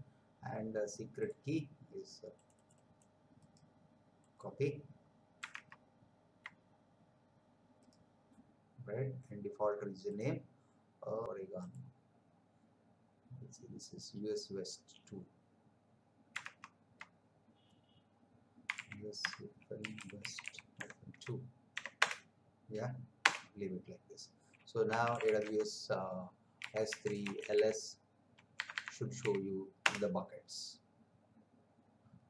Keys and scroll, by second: 5.6 alt+Tab, 16.6 alt+Tab, 18.6-21.7 typing, 22.0 Return, 23.2 Return, 24.9 a, 25.1 w, 25.2 s, 25.4 space, 26.6-27.5 typing, 28.5 BackSpace, 29.2 s, 29.8 Return.